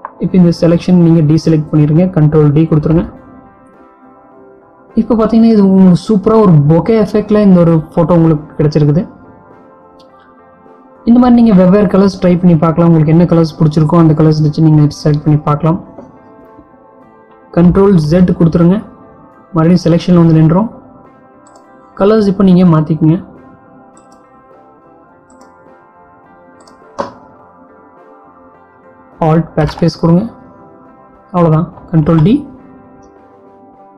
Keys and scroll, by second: 2.2 ctrl+d, 18.0 ctrl+z, 29.6 alt+BackSpace, 32.0 ctrl+d.